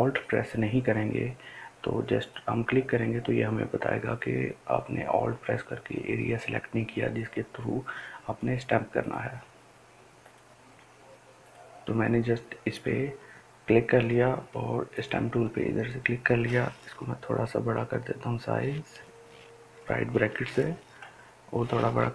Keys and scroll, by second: 20.1 ], 20.1 ].